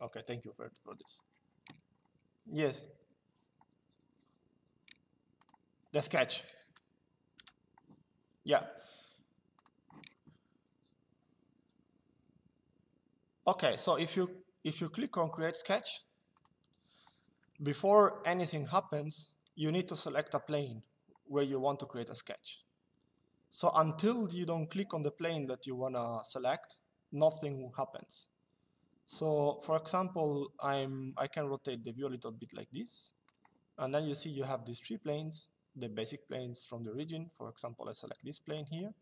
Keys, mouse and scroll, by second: 5.1 click, 7.0 Delete, 9.3 click, 16.1 click, 30.5 click, 38.2 click.